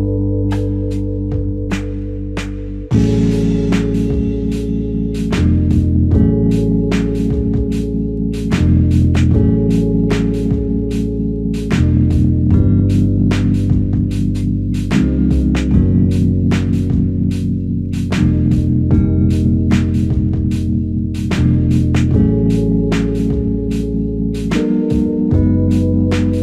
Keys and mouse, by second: 3.9 shift+click, 5.0 double click, 5.9 alt+click, 6.6 shift+click, 7.0 shift+double click, 7.3 shift+click, 8.0 alt+click, 9.3 f, 10.3 alt+click, 11.5 double click, 12.0 alt+click, 12.9 double click, 14.2 alt+click, 15.3 double click, 16.4 alt+click, 17.5 double click, 20.2 shift+click, 20.5 shift+double click, 21.1 alt+shift+click, 21.8 alt+click, 22.8 f, 23.7 double click.